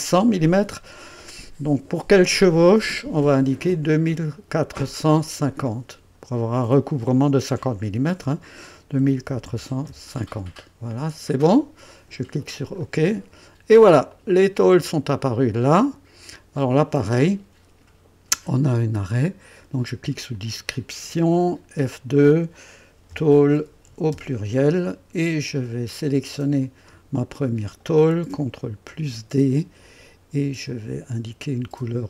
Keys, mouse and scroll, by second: 4.1 click, 5.5 click, 8.8 KP_2, 9.2 KP_4, 9.5 KP_5, 9.8 KP_0, 11.0 typing, 12.8 click, 14.1 click, 14.7 click, 15.6 click, 20.3 click, 21.7 F2, 22.7-24.3 typing, 25.4-26.1 typing, 26.6 click, 27.6 click, 28.9 ctrl+d, 30.6 click.